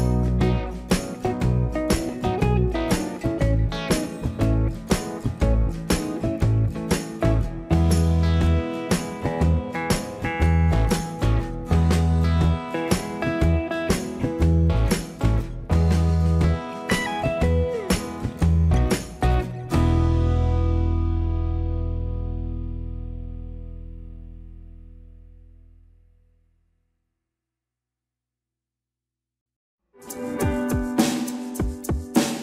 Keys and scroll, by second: 1.1 space, 8.1 Escape, 11.6 space, 23.7 space, 29.1 Return, 29.9 space.